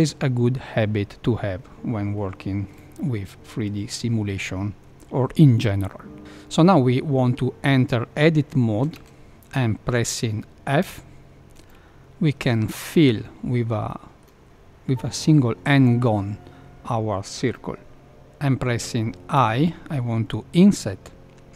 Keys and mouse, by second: 8.9 Tab, 10.8 f, 11.6 middle click, 13.9 middle click, 19.3 |.